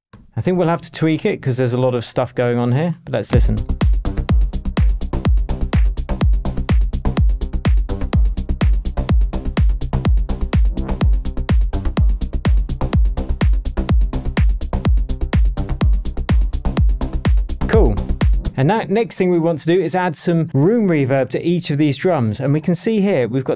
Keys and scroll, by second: 0.8 shift+super+d, 0.9 shift+super+Tab, 1.5 shift+Tab, 3.3 space, 18.4 space.